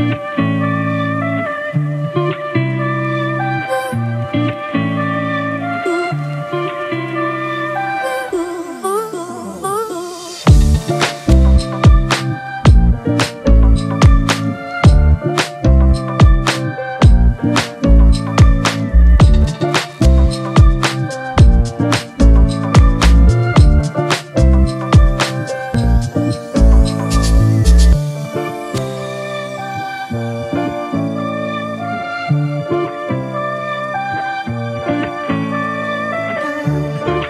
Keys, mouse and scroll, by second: 4.2 typing, 29.7 ctrl+t, 30.3 ctrl+t, 30.8 alt+shift+click, 33.8 alt+shift+click.